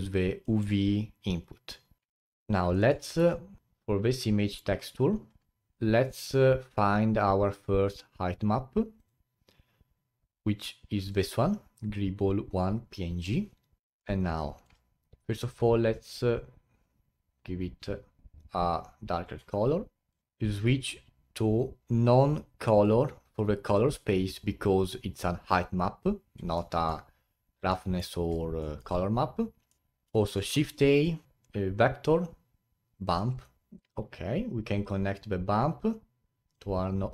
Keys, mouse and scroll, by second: 0.5-1.4 middle drag, 3.2 n, 3.6-13.8 drag, 13.8-15.2 middle drag, 15.2 click, 20.1 click, 20.2-22.9 drag, 26.5-28.1 middle drag, 28.1 scroll down 3, 28.6-29.8 middle drag, 29.8 click, 33.7-37.1 drag.